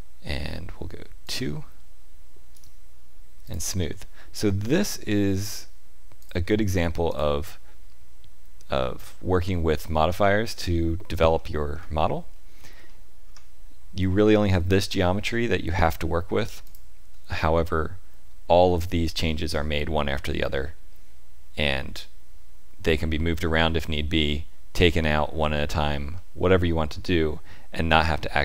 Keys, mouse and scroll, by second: 1.2 click, 2.5 right click, 6.1 click, 7.0 click, 11.3 shift+middle click, 11.9 middle click, 13.2 Tab, 16.6 click, 20.5 middle click, 26.1 middle click, 27.7 Tab.